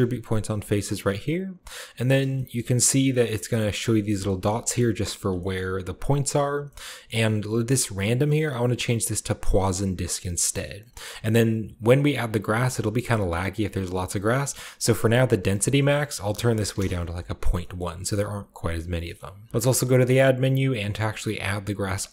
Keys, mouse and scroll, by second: 0.4 drag, 1.2 drag, 2.2 click, 2.2-4.0 scroll up 2, 2.2-3.0 shift+middle drag, 3.2-4.1 middle drag, 4.0 scroll up 1, 4.0 shift+scroll down 2, 4.1 shift+scroll up 2, 4.3-5.3 middle drag, 4.9-5.3 scroll down 2, 5.4 shift+scroll up 2, 5.5-7.9 middle drag, 7.9 click, 9.3 click, 10.0 drag, 10.4-11.4 scroll up 2, 15.3 click, 16.4-17.5 drag, 16.6 typing, 16.7 Return, 17.7-18.9 middle drag, 18.1-18.5 scroll down 1, 18.5-19.5 scroll up 2, 19.1-20.1 middle drag, 19.5 shift+a.